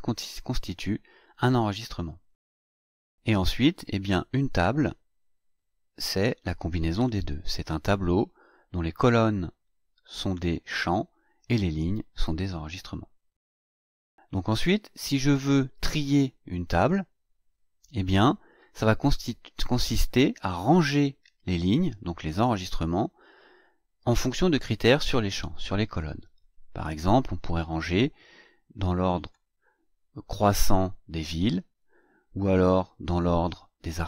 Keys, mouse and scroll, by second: 3.8-4.2 scroll down 2, 4.8-5.2 scroll down 2, 5.7-6.0 scroll down 2, 16.7 click, 29.2 click.